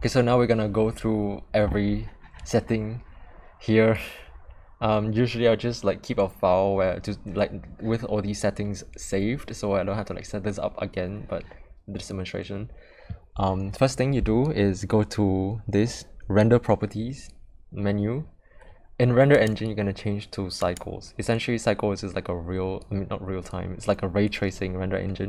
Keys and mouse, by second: 19.5-20.8 drag.